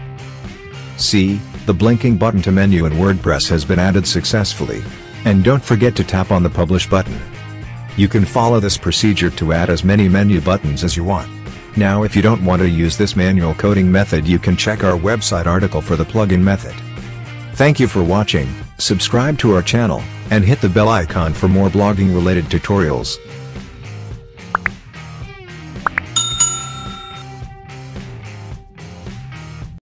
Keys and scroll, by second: 0.2 ctrl+v.